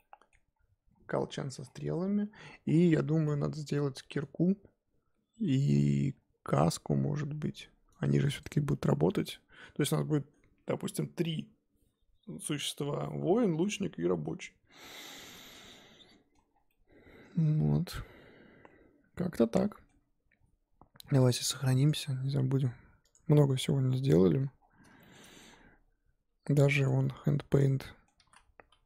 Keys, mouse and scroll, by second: 16.5 scroll down 1, 16.7-19.7 middle drag, 23.1 click, 23.6-24.0 scroll down 5, 24.0 middle click, 24.6-25.0 scroll down 1, 25.0 shift+middle click, 25.5 scroll up 1, 26.2-26.8 scroll up 4, 26.8 click, 27.0-28.2 middle drag, 28.2 r.